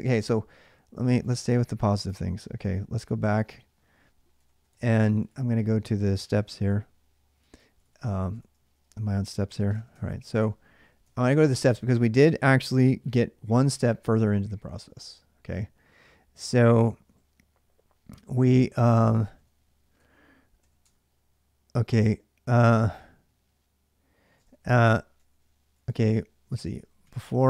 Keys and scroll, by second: 2.6 ctrl+a, 2.8 ctrl+a, 3.9-17.3 typing, 5.5 ctrl+a, 10.2 Return, 18.4-20.4 typing, 20.6 Return, 24.0-25.3 typing, 26.3 Return, 26.6-27.4 typing.